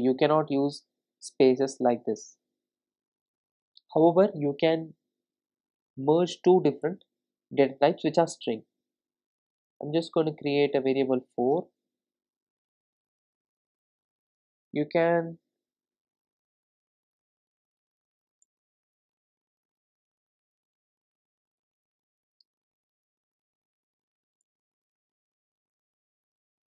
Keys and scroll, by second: 18.5 Return.